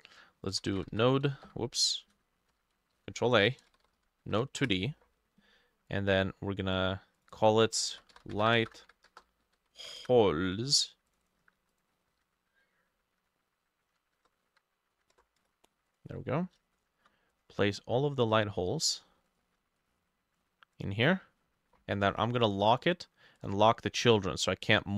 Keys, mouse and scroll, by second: 0.5-1.4 typing, 1.5 Escape, 2.0 ctrl+shift+a, 2.5 Escape, 3.0 ctrl+a, 3.4-4.8 typing, 3.6-13.9 drag, 7.7-10.3 typing, 8.6 shift+middle click, 12.2 Right, 13.9 Left, 14.2 BackSpace, 14.5 Right, 15.0 Right, 15.2 BackSpace, 15.4 Return, 16.1 scroll down 5, 16.8 shift+click, 18.0-18.4 scroll up 1, 19.3 shift+click.